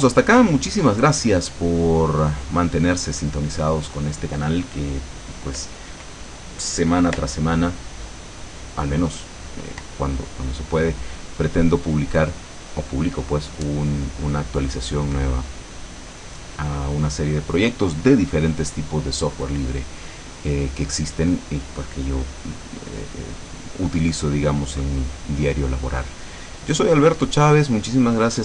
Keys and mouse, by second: 2.0-4.1 drag.